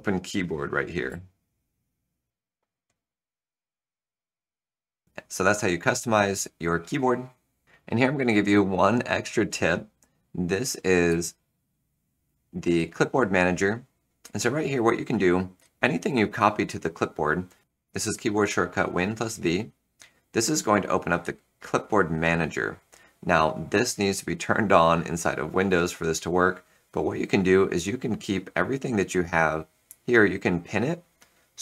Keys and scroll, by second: 1.0 End, 1.0 Home, 1.8 ctrl+v, 7.6 Return, 11.0 Return, 12.5 super+v.